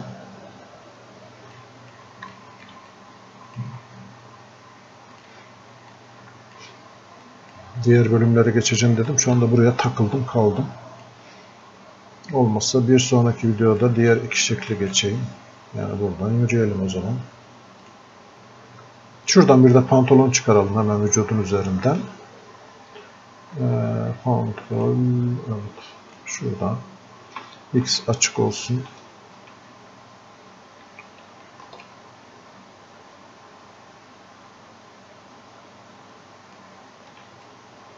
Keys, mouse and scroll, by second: 1.6 click, 2.4 alt+click, 3.0-7.3 drag, 10.7-13.8 drag, 13.8 click, 17.9-24.8 drag, 27.9 x, 30.9 x, 31.9-37.4 ctrl+drag, 37.4-37.9 drag.